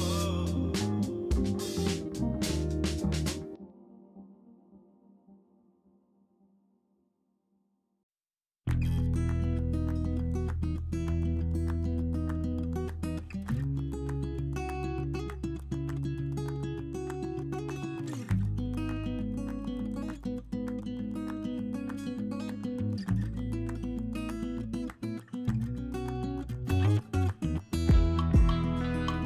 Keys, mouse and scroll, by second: 0.7 click, 1.1 g, 2.6 middle click, 3.4 click, 3.7 middle click, 5.0 g, 6.7 click, 7.5 Tab, 8.0-9.4 drag, 9.5 Tab, 9.9 3, 10.5 click, 12.2 i, 13.8 z, 14.4 click, 15.1 ctrl+z, 15.8 i, 17.4 ., 18.3 s, 19.5 x, 20.7 KP_1, 21.7 k, 25.2 z, 25.6 Tab, 25.9 click, 26.1-27.1 middle drag, 27.3 shift+middle drag, 27.7 middle click, 28.0 shift+middle click, 28.4 click, 28.8 KP_1.